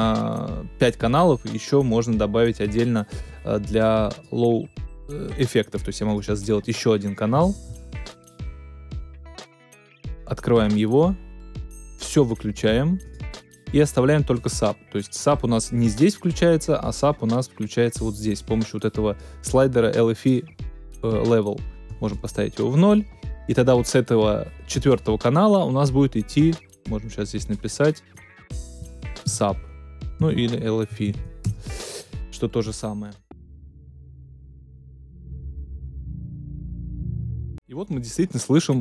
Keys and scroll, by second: 29.2-31.5 typing, 33.2 space, 37.4 space.